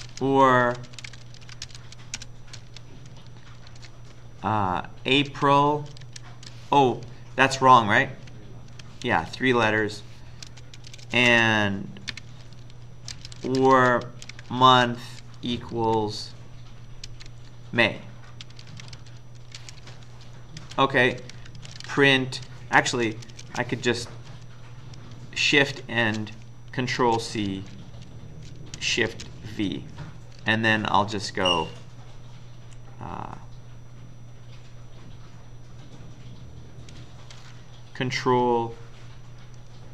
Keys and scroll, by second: 0.0-3.7 typing, 5.3-6.5 typing, 7.0 Left, 7.6 Left, 7.7-9.1 Left, 9.1 Delete, 9.2 Delete, 9.7 End, 10.5-23.3 typing, 24.1 Up, 24.3 Up, 25.6 shift+End, 27.0 ctrl+c, 27.7 Down, 27.9 Down, 28.9-31.6 typing.